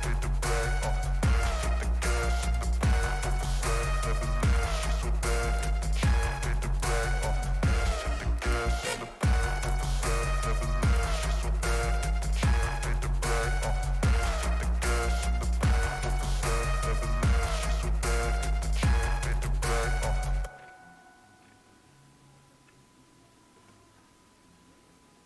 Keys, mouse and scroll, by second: 2.4 click, 4.4 click, 6.8 click, 8.4 click, 9.6 click, 11.2 click, 14.9 click.